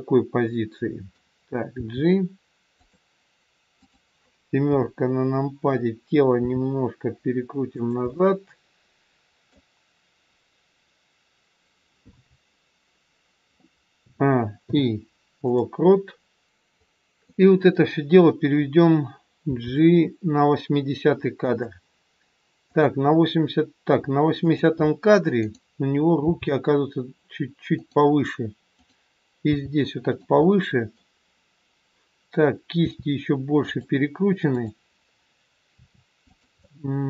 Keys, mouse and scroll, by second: 1.6 g, 3.8 click, 4.6 KP_7, 6.3 r, 8.0 middle click, 11.9-14.0 scroll down 1, 14.0 a, 14.5 i, 16.6 click, 19.5 g, 22.8 click, 24.4 click, 26.3 g, 28.8 click, 29.6 g, 30.4 middle click, 32.9 r, 34.4 click, 35.6 r, 36.5 middle click.